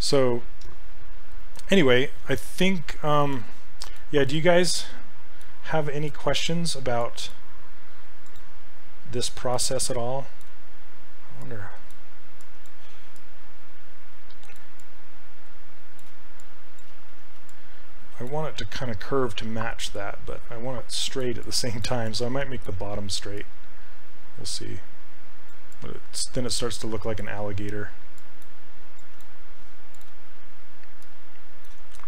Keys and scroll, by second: 7.0 s, 12.5 s, 17.0 ctrl+z, 22.1 s, 29.0 s.